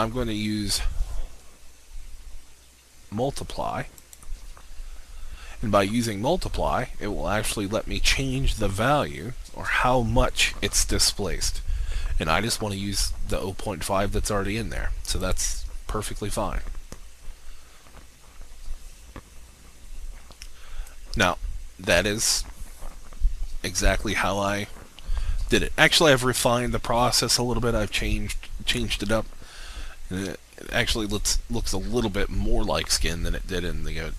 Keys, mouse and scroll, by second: 17.0-17.5 scroll down 1, 20.7 alt+click.